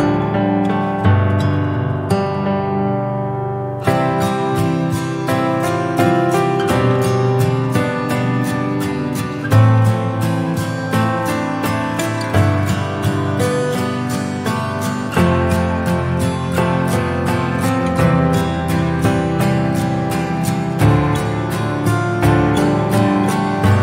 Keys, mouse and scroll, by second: 0.0 scroll up 2, 0.3 Tab, 1.1-2.8 middle drag, 2.8 Tab, 3.9-4.3 scroll down 2, 4.3 /, 4.9-5.3 scroll down 1, 5.7 click, 6.9 /, 7.4-9.5 middle drag, 9.5 Tab, 10.1 middle click, 10.8-11.3 scroll up 2, 11.4 Tab, 12.0 click, 12.4 click, 14.8 Tab, 16.1 ctrl+r, 18.0 2, 18.4 alt+click, 19.6 alt+shift+click, 20.7 ctrl+b.